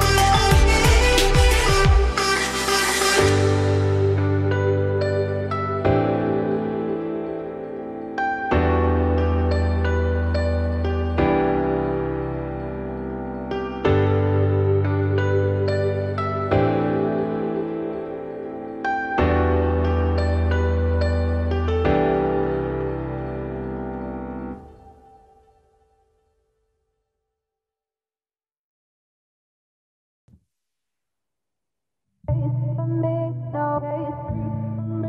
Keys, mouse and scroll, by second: 0.4 scroll up 1, 0.6 g, 2.0 z, 2.6 click, 3.3 g, 5.1 Tab, 5.4 z, 5.9 click, 6.1 scroll down 2, 6.3-6.8 middle drag, 6.8 ctrl+s, 7.1 scroll down 5, 7.3-12.8 middle drag, 12.9 shift+middle drag, 13.1-13.7 scroll up 4, 13.7 click, 14.1 middle click, 14.4 Tab, 14.7 click, 15.0 3, 15.1 click, 16.3 middle click, 17.1-17.9 scroll up 1, 18.2 shift+d, 19.4 p, 20.0 Tab, 20.3 click, 21.7 Tab, 22.1 a, 23.1 e, 24.9 click, 25.6-27.3 middle drag, 27.3-27.7 scroll up 2, 27.7 click, 27.9 scroll down 2, 28.0 middle click, 28.5 click, 28.7 scroll up 1, 29.0 s, 30.2 z, 30.7 shift+click, 31.0 z, 31.5 middle click, 31.8 s.